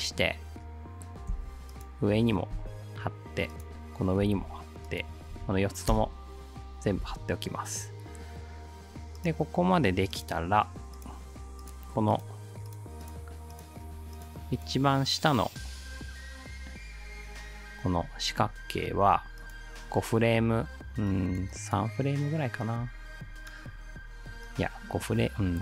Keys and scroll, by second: 1.3 ctrl+c, 2.6 ctrl+v, 4.2 ctrl+v, 5.9 space, 7.0 space.